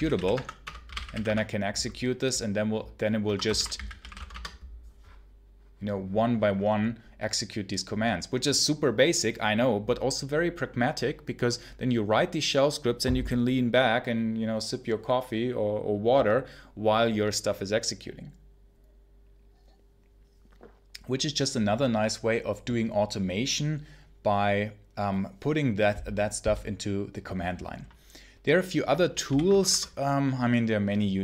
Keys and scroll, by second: 0.0-1.5 typing, 3.1 Escape, 3.2-4.4 typing, 29.1 ctrl+l, 29.4 ctrl+Return.